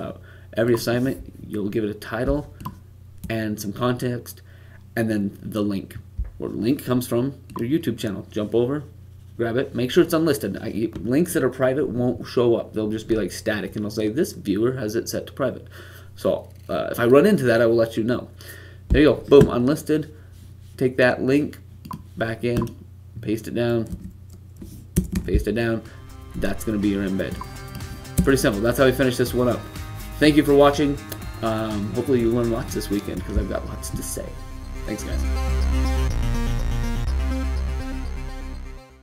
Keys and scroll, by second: 23.8 v, 25.2 super+v.